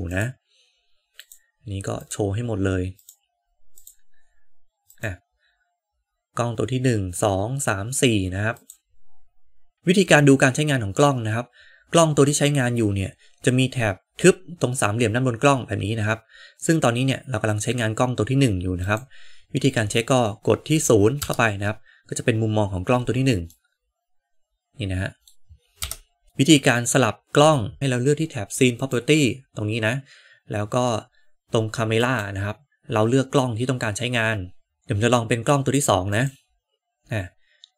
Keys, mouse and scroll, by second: 0.0 click, 1.1 click, 1.9 click, 2.9-6.0 drag, 8.5 click, 18.8-19.3 drag, 21.1 KP_0, 23.5-25.2 middle drag, 25.7 KP_0, 28.7 click, 31.9-36.2 drag.